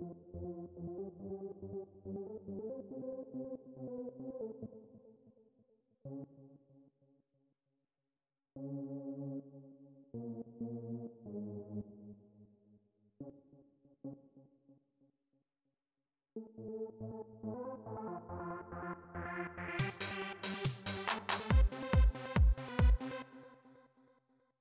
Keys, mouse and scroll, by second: 4.4 space, 5.8 l, 8.3 l, 9.1 k, 9.8 j, 11.0 h, 11.5 click, 12.9 l, 13.8 l, 15.0 click, 16.1 space, 23.0 space, 24.4 click.